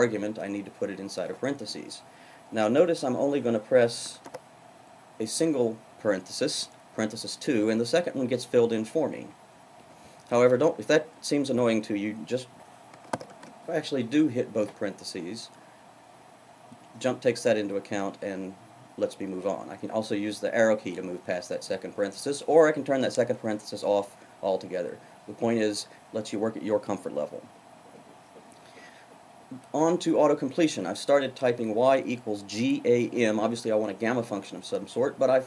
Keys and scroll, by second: 4.0 shift+(, 9.7 Right, 12.8 shift+(, 13.2 shift+).